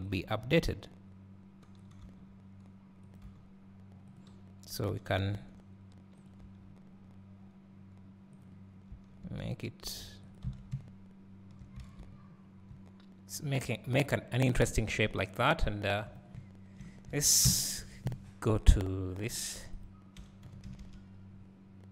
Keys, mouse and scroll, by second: 2.6 r, 3.4 g, 4.8 click, 5.4 s, 8.5 click, 9.0 s, 10.7 Tab, 11.8 alt+a, 12.5 scroll down 1, 15.6-18.7 drag, 17.4 ctrl+alt+KP_0, 19.4 g.